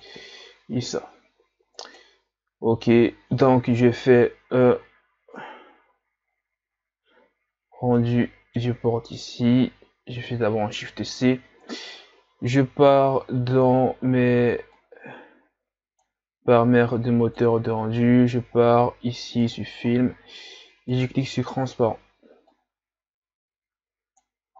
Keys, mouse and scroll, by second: 6.6-7.1 drag, 8.1-10.2 middle drag, 10.2 shift+c, 21.1 click.